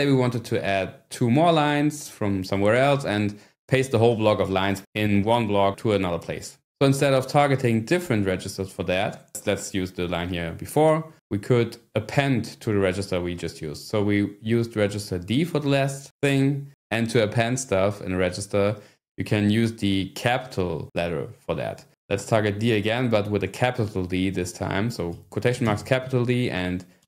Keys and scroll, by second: 25.3 ", 25.7 shift+d, 27.0 y.